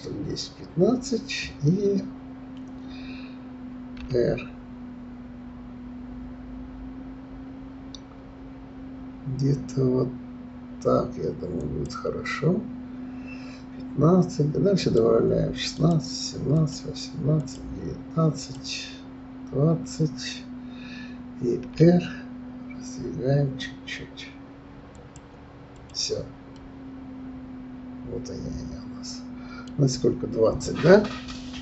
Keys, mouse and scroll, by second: 3.9 r, 14.8-19.7 drag, 21.7 r, 25.7 click, 26.5-29.5 middle drag.